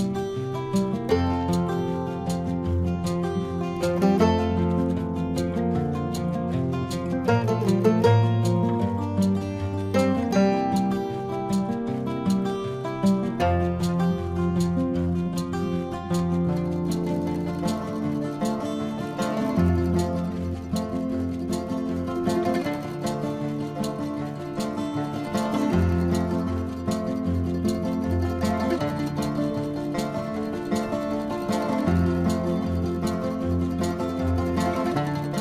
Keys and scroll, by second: 13.6 space, 14.4 ctrl+=, 17.2 ctrl+alt+z, 21.9 space, 22.8 space, 26.9 ctrl+=.